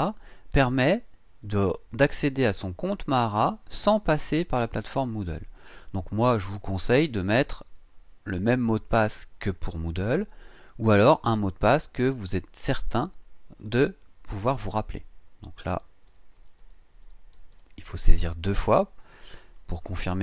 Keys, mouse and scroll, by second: 15.6-17.5 typing, 16.1 KP_Divide, 17.0 KP_Divide, 19.5 click.